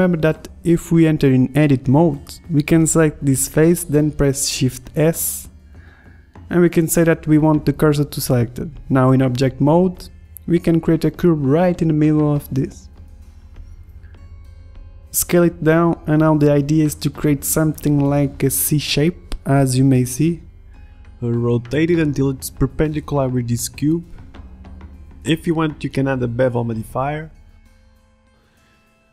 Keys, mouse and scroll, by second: 1.1 Tab, 1.7 ctrl+Tab, 2.9 ctrl+Tab, 5.0 shift+s, 5.7 Tab, 6.0 shift+a, 8.9 s, 11.5 ctrl+z, 12.2 s, 13.3 s, 14.3 s, 14.4-14.7 drag, 14.7 Tab, 15.3 middle click, 15.4 click, 15.8 ctrl+r, 16.2 ctrl+Tab, 16.5 click, 16.9 e, 18.0 ctrl+r, 18.6 e, 20.7 ctrl+Tab, 20.9 click, 21.0-24.6 typing, 21.4 ctrl+Tab, 22.1 Tab, 22.5 Tab, 23.2 Tab, 25.4 click, 25.6 middle drag, 25.7 z, 25.9 middle click, 26.5 middle drag, 26.7 click, 27.0-29.0 drag.